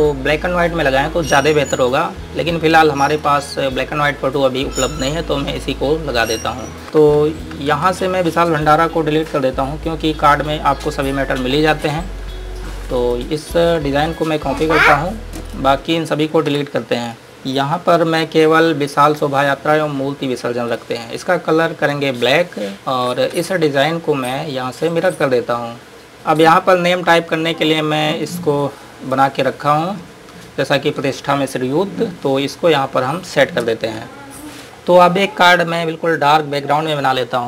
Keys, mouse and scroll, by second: 2.5 click, 6.8 ctrl+Num_Lock, 8.1 typing, 8.3 click, 13.2 ctrl+Num_Lock, 13.2 ctrl+click, 15.7 click, 16.8 Delete, 20.9 click, 25.3 click, 25.9 scroll up 1, 28.5 click, 30.0 scroll up 1, 32.0-32.6 scroll down 1, 33.5 click, 34.1 Delete, 34.9 click.